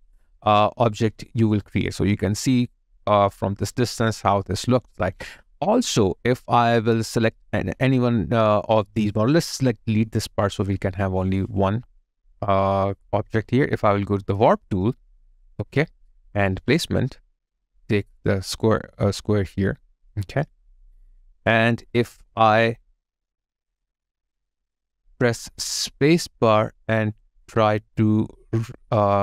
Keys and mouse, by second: 1.6 alt+click, 5.1 alt+click, 9.8 Delete, 20.6 alt+click.